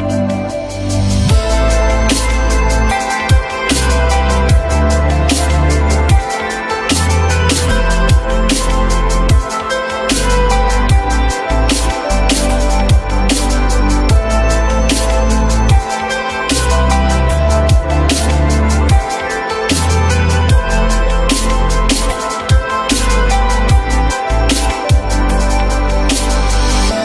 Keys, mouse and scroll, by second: 1.1 shift+click, 7.2 Delete, 9.9 alt+middle click, 10.8 alt+middle click, 10.9 alt+middle click.